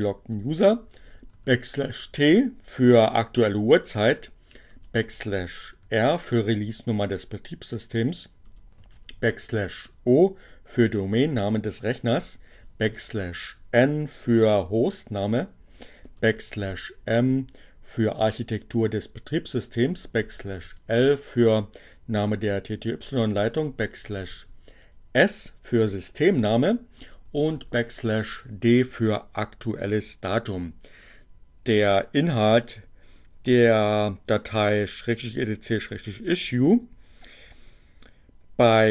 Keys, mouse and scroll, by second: 1.2 alt+t, 3.7 space, 5.4 r, 6.5 space, 9.1 alt+o, 11.4 space, 14.0 space, 19.1 space, 21.6 space, 26.7 space, 27.5 alt+d, 29.3 BackSpace.